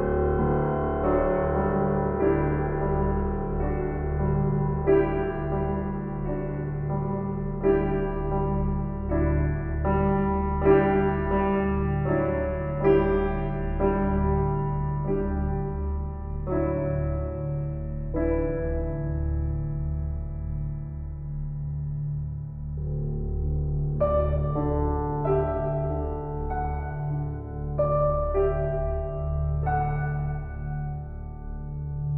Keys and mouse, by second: 3.2 g, 3.5 y, 8.7 click, 11.8-13.0 alt+drag, 14.7-17.6 alt+drag, 18.4-25.9 alt+drag, 26.4 g, 26.6 y, 28.3 Escape, 29.1 g, 29.5 z.